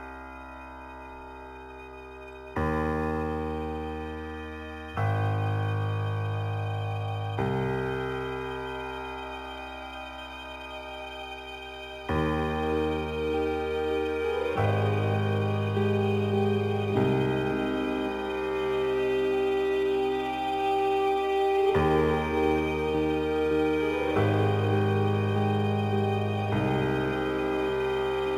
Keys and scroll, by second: 14.2 space, 17.9 ctrl+t, 26.3 Right.